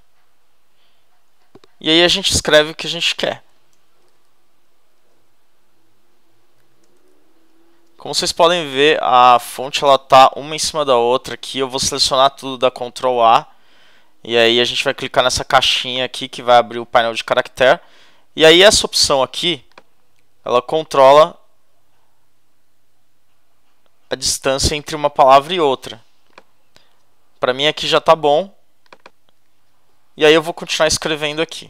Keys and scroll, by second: 3.7 shift+a, 4.0 shift+l, 4.9 shift+Return, 6.3-9.8 typing, 7.7 shift+Return.